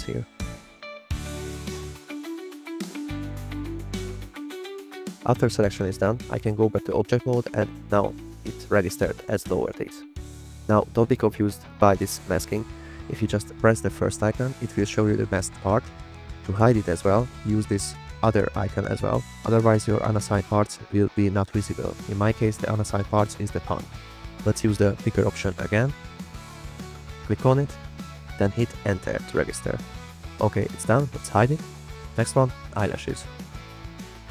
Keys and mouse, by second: 0.1 click, 0.8 click, 1.6 click, 1.7-3.0 typing, 3.4 click, 4.5 click, 5.4-5.9 drag, 7.1 click, 7.6 click, 10.4 click, 12.6 click, 14.6 click, 16.5 click, 16.9 click, 16.9 middle click, 17.3-17.6 drag, 17.8 click, 26.1 click, 27.3 click, 28.6 Return, 30.5 click, 30.9 click, 34.2 click.